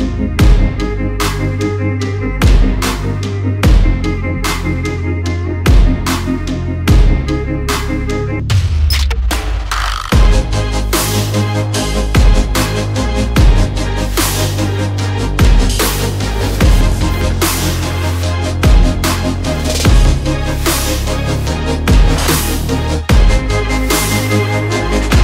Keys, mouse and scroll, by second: 0.1 double click, 0.4 click, 0.6 double click, 1.6 click, 1.8 double click, 2.1 click, 3.3-3.8 scroll down 1, 3.8 click, 5.1 shift+click, 6.9 alt+scroll up 1, 7.3 click, 8.5 alt+scroll down 1, 8.8 alt+scroll up 1, 9.6 alt+scroll down 1, 10.6 alt+click, 11.5 click, 15.6 alt+scroll up 1, 15.9 click, 16.2 double click, 16.5 click, 16.7 double click, 17.6 click, 17.8 double click, 18.1 alt+scroll down 1, 18.3 alt+scroll up 1, 18.6 click, 19.1 double click, 19.4 click, 19.6 alt+scroll down 1, 19.9 alt+scroll up 1, 20.3 click, 20.5 double click, 21.0 alt+scroll down 1, 21.5 alt+scroll up 1, 21.9 click, 23.8 alt+scroll down 1, 24.1-24.4 alt+scroll up 1, 24.9 click, 25.1 double click.